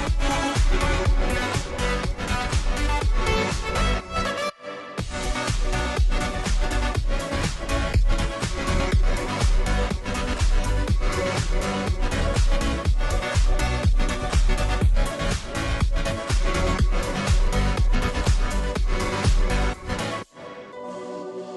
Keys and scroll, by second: 0.3 ctrl+t, 19.0 ctrl+t.